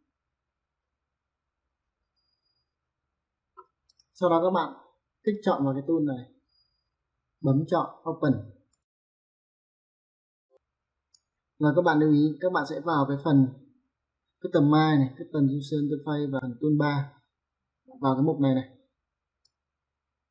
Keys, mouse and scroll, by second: 3.8 click, 5.2 click, 8.7 click, 19.5 click.